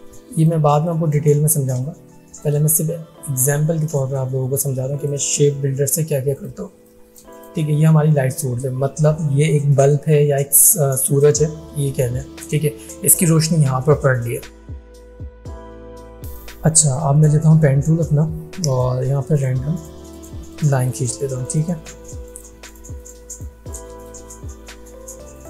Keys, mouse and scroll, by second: 0.4 click, 0.7 space, 0.9 click, 1.3 space, 2.4 alt+shift+click, 6.8 space, 6.9 click, 7.3 space, 7.4 click, 17.2 click.